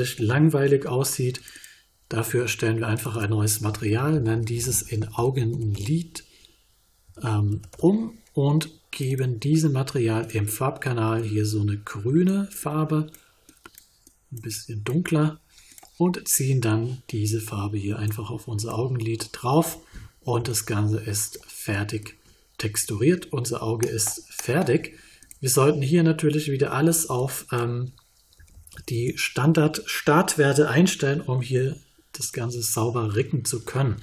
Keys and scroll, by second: 3.9-5.7 typing, 7.0 e, 7.5 d, 7.7 Return, 28.3 1, 28.9 Return.